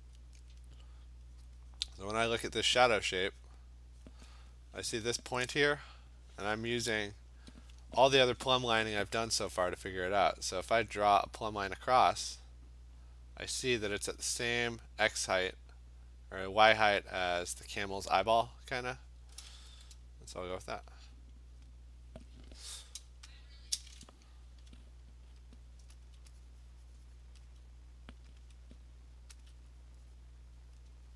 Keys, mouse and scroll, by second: 1.5 click, 1.8 click, 1.9 click, 2.5 click, 3.5 click, 4.1 click, 4.9 click, 5.6 click, 6.5 click, 17.0 click, 20.8 click, 21.2 click, 21.7 click, 23.6-25.5 scroll, 23.6 click, 25.5 alt+click, 25.6 alt+click, 26.1 alt+click, 27.3 click, 27.5 click, 28.4 alt+click, 29.5 alt+click, 29.9 click, 30.8 click.